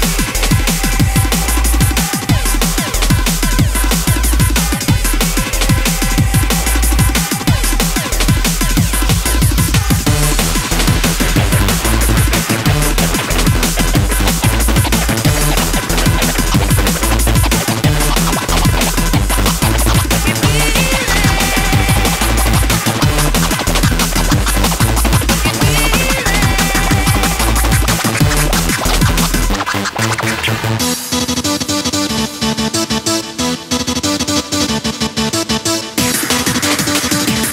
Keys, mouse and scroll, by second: 34.2-35.8 drag.